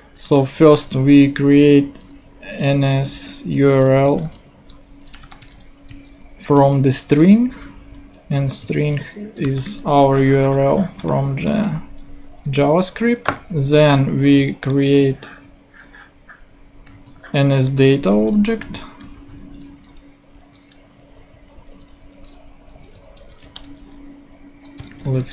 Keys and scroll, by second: 0.7 super+x, 2.4-6.2 typing, 3.7 shift+Return, 6.4 super+space, 7.5 super+Left, 9.4 alt+shift+u, 9.6 r, 12.3 ;, 16.9 super+x, 18.3 Return, 18.6 super+v, 19.2 super+Left, 20.1-21.3 typing, 22.5 Down, 22.8 Return, 23.4-25.3 typing.